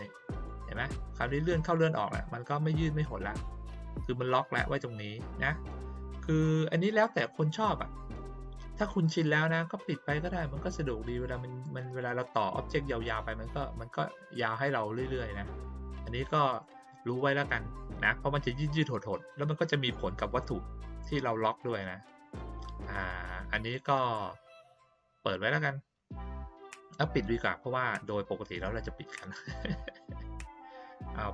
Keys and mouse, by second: 1.7-2.1 drag, 3.0-3.4 drag, 11.4 click, 12.8 drag, 18.9-19.9 drag, 23.0-23.5 drag, 27.1 click.